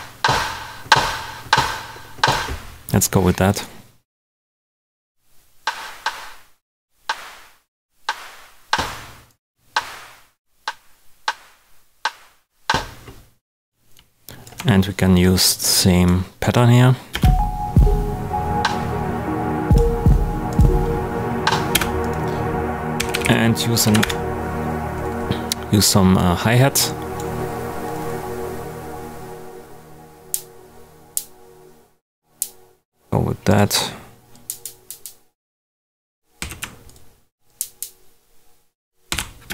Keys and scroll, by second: 17.1 space, 21.7 space, 22.7-23.7 typing, 23.8 Down, 24.0 Return, 36.3 super+d, 39.0 super+d, 39.4 super+space.